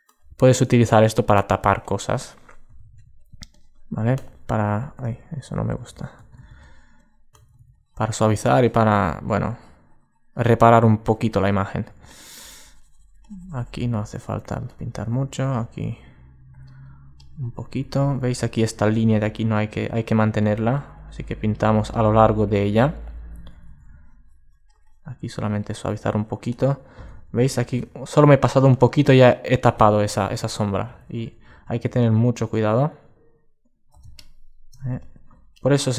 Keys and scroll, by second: 5.0 alt+super+z, 5.4 alt+super+z, 27.0 alt+super+z, 30.1 alt+super+z, 30.7 alt+super+z.